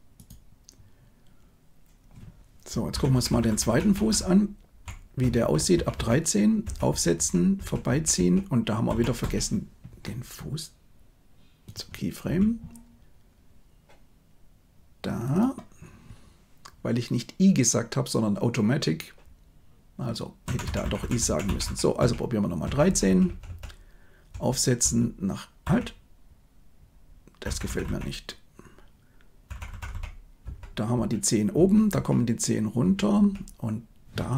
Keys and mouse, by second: 2.9 Left, 3.1 Left, 3.2 Left, 3.4 Left, 3.6 Left, 3.8 Left, 3.9 Left, 4.1 Left, 4.6 Left, 4.7 Left, 4.7 Left, 5.1 Right, 5.3 Right, 5.5 Right, 5.7 Right, 5.9 Right, 6.6 Right, 6.8 Right, 7.1 Right, 7.5 Right, 7.8 Right, 8.1 Right, 8.8 Left, 9.1 Right, 12.2 r, 20.4 Left, 20.6 Left, 20.8 Left, 20.9 Left, 21.1 Left, 21.4 Left, 21.6 Left, 21.9 Right, 22.6 Right, 22.8 Right, 23.0 Right, 23.2 Right, 23.4 Right, 24.3 Right, 24.8 Right, 25.6 Left, 27.4 Left, 27.6 Left, 27.8 Left, 29.4 Left, 29.6 Left, 29.8 Left, 30.4 Right, 30.9 Right, 31.5 Right, 31.8 Right, 32.7 Right, 33.1 Right.